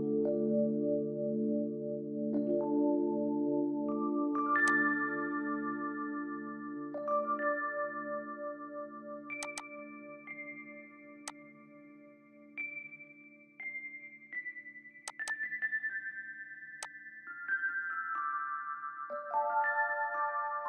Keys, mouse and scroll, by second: 5.8 middle click, 6.3 scroll up 1, 6.6-6.9 scroll down 1, 7.5 middle click, 7.9-8.3 scroll up 1, 9.6 double click, 10.9 typing, 15.3 double click, 16.0-16.6 typing, 18.0 middle click, 18.4 scroll up 1, 18.7 scroll down 1, 19.0 middle click, 20.0-20.4 scroll down 1, 20.4 middle click.